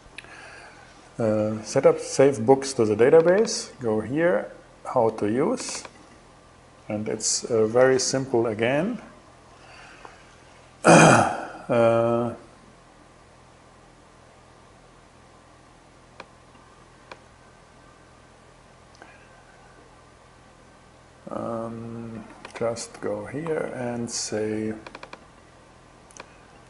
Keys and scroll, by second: 21.7 super+c, 23.0 super+v.